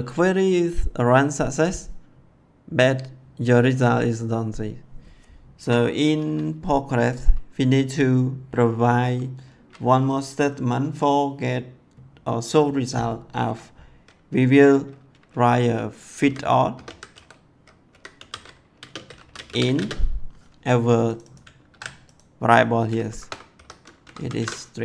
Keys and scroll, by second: 5.5 Return, 16.1-19.6 typing, 21.6 ctrl+c, 23.0 shift+', 23.4 ;, 23.9 Left, 24.2 ctrl+v.